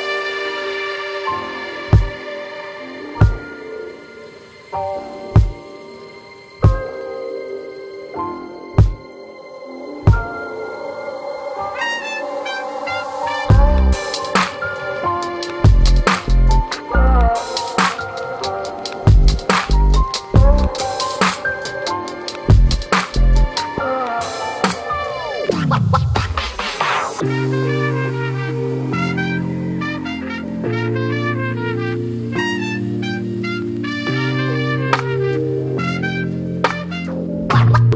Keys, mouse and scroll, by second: 0.0-1.8 drag, 1.8 scroll down 1, 1.9 middle click, 2.2 click, 3.0 middle click, 3.4 scroll up 1, 3.7 click, 4.1 middle click, 4.3 ctrl+alt+click, 4.7 scroll down 1, 4.9 scroll up 1, 5.1-6.9 drag, 6.9 scroll down 1, 7.0 middle click, 7.6-8.8 drag, 8.8 x, 8.9 click, 9.3 x, 9.4 click, 10.1 x, 10.2 click, 10.7 middle click, 10.9-14.6 ctrl+alt+drag, 14.6 middle click, 14.9 x, 15.0-16.6 drag, 16.6 middle click, 16.9 ctrl+alt+click, 17.5 middle click, 17.8-19.4 drag, 19.4 middle click, 19.5 scroll up 1, 19.7-20.9 drag, 20.9 middle click, 21.1 x, 21.2-24.4 drag, 24.4 middle click, 24.7-26.2 drag, 26.2 shift+middle click, 26.7-28.4 drag, 28.4 middle click, 28.7 click, 29.3 middle click, 29.6-30.7 drag, 30.7 middle click, 31.0 scroll up 1, 31.2 ctrl+alt+click, 31.7 x, 31.7 click, 32.4 scroll down 2, 32.5 middle click, 32.9 click, 33.3-33.9 scroll down 4, 33.3 middle click, 33.9 click, 34.4 middle click, 34.5 scroll up 2, 34.7-35.9 drag, 35.9-36.3 scroll up 2, 36.3 click, 36.8 shift+middle click, 37.2-37.9 drag.